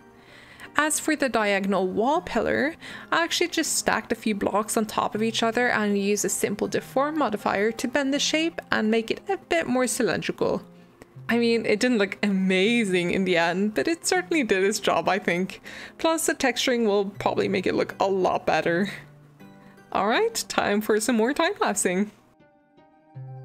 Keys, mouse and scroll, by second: 0.0-2.7 middle drag, 2.7 click, 3.6-6.6 drag, 11.5-22.4 middle drag.